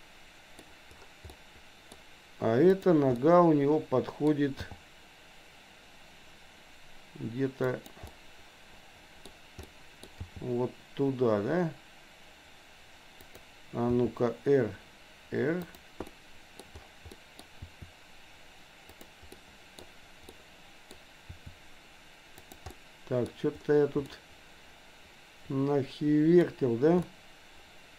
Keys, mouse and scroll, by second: 1.4 middle click, 2.6 click, 3.3-4.4 middle drag, 4.8 g, 8.1-9.4 middle drag, 9.6 middle click, 10.3 g, 14.0 r, 16.1 middle click, 17.1 middle click, 17.8 r, 19.3 middle click, 20.3 middle click, 21.3 r, 22.8 middle click, 24.1-26.5 middle drag, 27.1-27.9 middle drag.